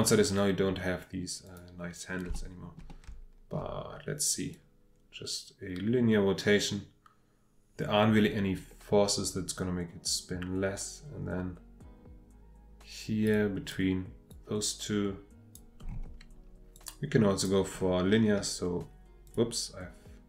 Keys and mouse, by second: 1.4 click, 2.4 shift+middle click, 2.9 shift+middle click, 4.5-13.3 drag, 14.3-15.6 drag, 16.7-17.5 drag, 19.2 click.